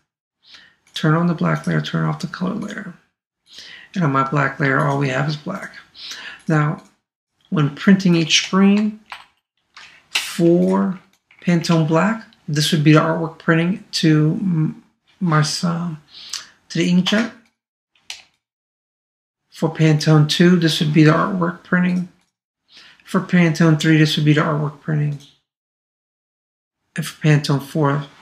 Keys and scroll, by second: 9.1 super+-, 11.9 super+space.